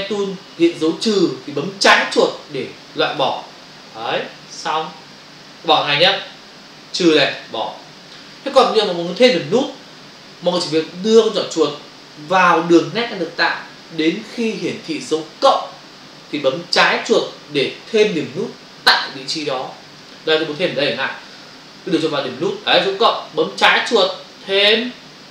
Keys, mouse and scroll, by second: 3.2 click, 7.2 click, 23.7 click.